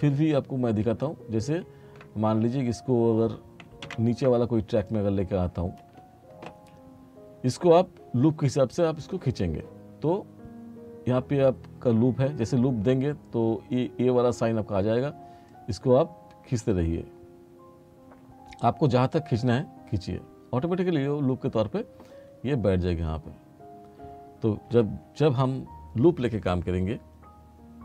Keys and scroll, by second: 3.9 ctrl+z.